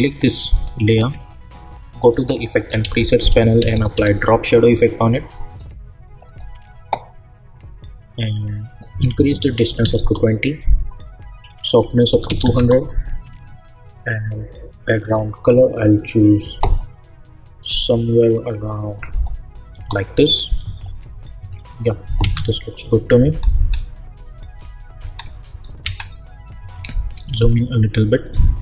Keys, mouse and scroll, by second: 0.1 click, 2.8 ctrl+a, 3.1-4.4 typing, 6.0 click, 8.6 click, 9.9 Return, 11.5 click, 12.5 Return, 15.0 click, 18.1 click, 19.7 Return, 20.8 click, 22.2 space, 27.1 =, 27.7 click.